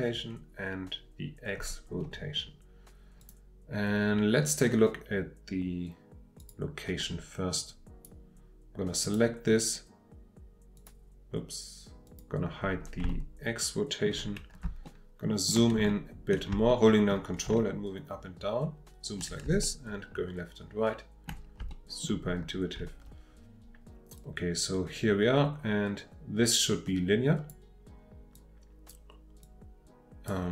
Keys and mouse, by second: 3.2 click, 6.4 click, 7.7 click, 9.0 click, 10.7 click, 12.0 click, 13.2 shift+middle click, 14.9 ctrl+middle click, 15.9 ctrl+middle click, 16.7 shift+middle click, 17.6-19.3 ctrl+middle drag, 19.4 ctrl+middle click, 19.7-21.3 ctrl+drag, 21.3-21.7 ctrl+middle drag, 21.7 shift+click, 22.0 shift+middle click, 22.7 shift+middle click, 24.2-27.5 drag, 28.3 click, 29.4-30.3 drag.